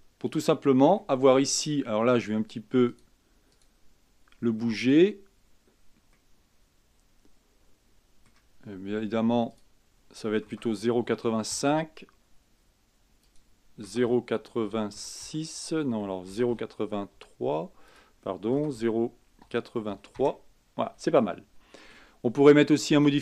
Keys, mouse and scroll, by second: 1.2-3.1 middle drag, 3.1-4.8 drag, 4.8-5.4 middle drag, 5.4-6.3 scroll up 5, 6.3-9.3 middle drag, 9.7-12.7 drag, 13.4-16.5 drag, 16.5 KP_0, 16.7 KP_Decimal, 17.3 KP_8, 18.1-21.0 drag, 21.0-21.4 scroll down 3, 21.4-23.1 middle drag, 23.1 click.